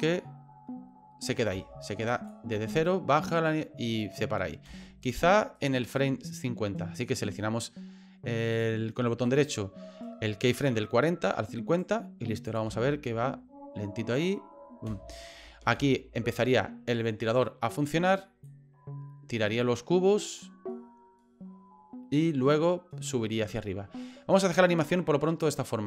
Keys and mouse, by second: 1.5 space, 2.1 click, 2.5 space, 4.7 space, 5.0 right click, 5.6-7.2 right drag, 8.5 right click, 9.2-11.8 right drag, 12.5 click, 12.7 space, 14.9 space, 15.4 space, 15.7 space, 18.4-22.5 drag, 25.4 right click.